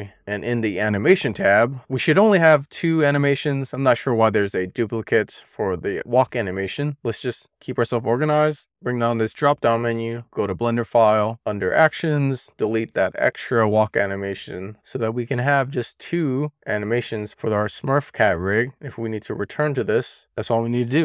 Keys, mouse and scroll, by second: 0.0 click, 2.3-8.7 drag, 8.7 super+s, 9.3-10.6 drag, 11.3-12.0 scroll up 2, 12.1 click, 13.4-16.3 right drag, 16.5 super+s, 18.2-20.2 drag.